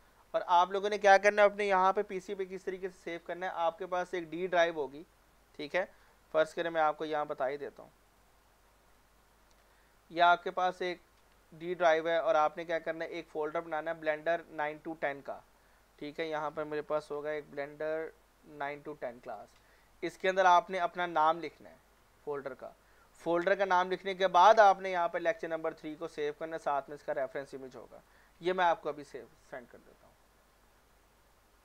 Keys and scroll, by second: 17.2-18.3 typing.